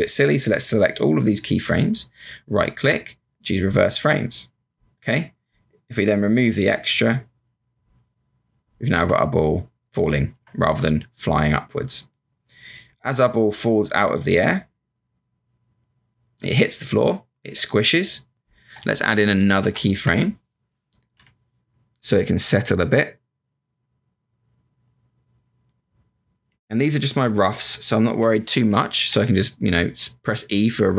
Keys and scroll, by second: 8.9 Return, 10.3 Return, 19.6 F7, 20.0 F5, 21.1 b, 29.1 e.